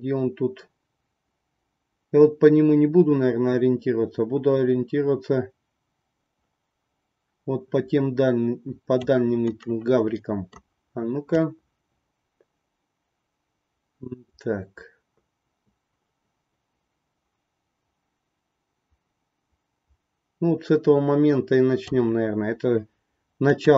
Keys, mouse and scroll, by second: 9.6 middle click, 11.3-21.9 drag, 23.5-23.7 drag.